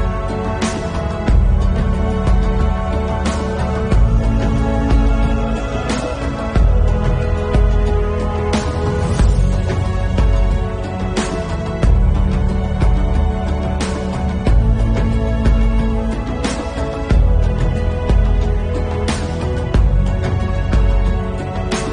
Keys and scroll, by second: 1.7 ctrl+alt+z, 2.9 ctrl+s, 8.3 ctrl+alt+z, 8.8 ctrl+alt+z, 13.0 [, 15.1 ctrl+s, 18.7 ctrl+s, 19.9 ctrl+alt+z, 20.0 ctrl+s, 20.6 ].